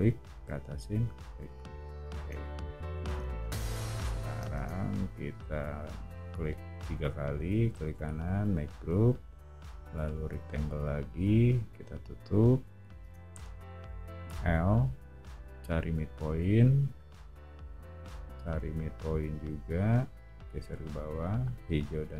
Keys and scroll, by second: 2.2 space, 3.0 o, 4.5 space, 9.9 r, 13.0 space, 14.2 l.